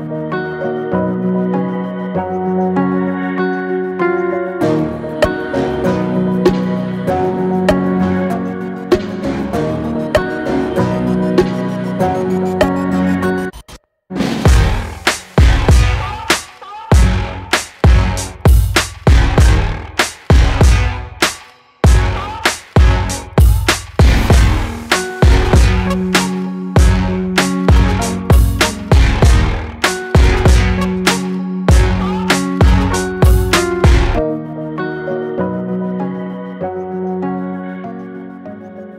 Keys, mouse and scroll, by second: 30.2-31.4 middle drag, 31.4 Tab, 31.7-32.1 scroll down 1, 32.1-33.5 middle drag, 33.5-36.5 right drag, 36.5-38.1 scroll down 1, 38.1 click, 38.5-38.9 scroll down 1.